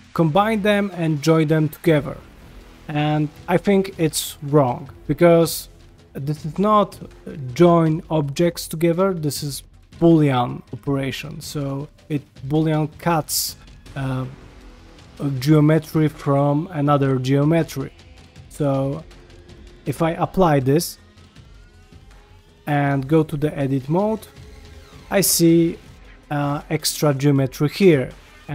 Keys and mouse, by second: 0.7 shift+middle drag, 1.8 ctrl+middle drag, 2.3 ctrl+middle click, 4.4 ctrl+middle click, 11.7 ctrl+middle click, 18.3-18.8 ctrl+middle drag, 19.7 ctrl+middle click, 20.6 q, 22.0 ctrl+middle click, 22.8 Tab, 23.5 click, 24.6 1, 24.8 click, 25.1 g, 26.7 click, 27.1 g, 28.1 middle click.